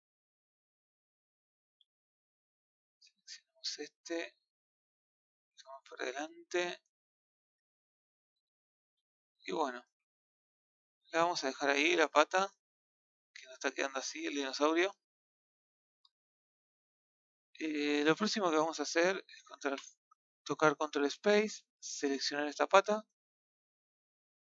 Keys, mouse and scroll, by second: 1.2 click, 2.5-3.8 middle drag, 3.8 click, 8.9 Tab, 11.0 scroll down 2, 11.2-12.0 middle drag, 12.0 a, 12.2 scroll down 1, 12.4-15.4 middle drag, 16.4-19.6 middle drag, 19.6 ctrl+space, 20.7-21.8 middle drag, 21.8 click.